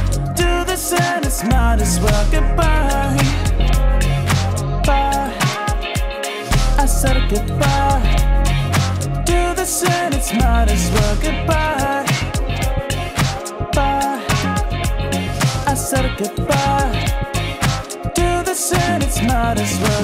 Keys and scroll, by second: 7.7 ctrl+t, 11.4 ctrl+t.